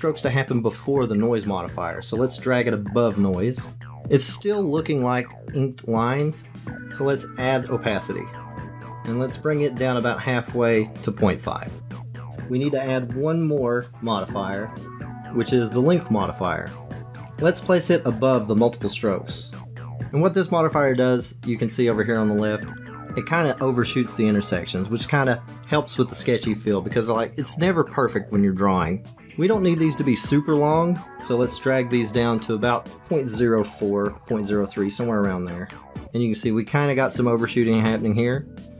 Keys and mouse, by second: 7.4-8.5 drag, 10.7-12.3 drag, 14.5-16.8 drag, 17.1 click, 17.7 click, 18.6 click, 19.6 click, 32.8-35.7 drag, 35.8 click.